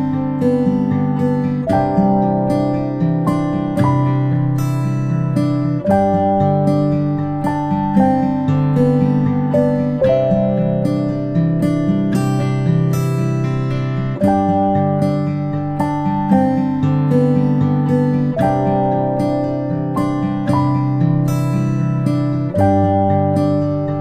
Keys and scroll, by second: 13.3-15.1 ctrl+space, 16.3 space, 16.5 space, 16.6 space, 17.1 p.